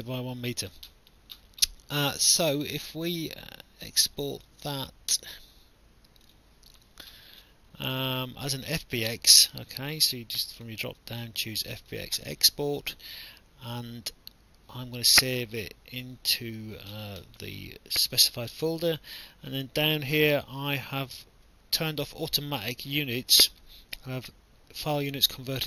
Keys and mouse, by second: 4.4 click, 6.3 click, 10.5 click, 11.9 click.